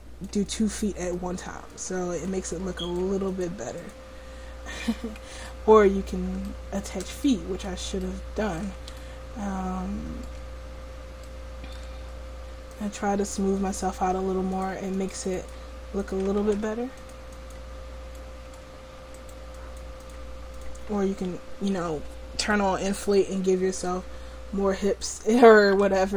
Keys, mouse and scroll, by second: 5.5-11.4 middle drag, 12.8-18.8 drag, 16.5 ctrl+z, 21.2 ctrl+z, 25.7 ctrl+z.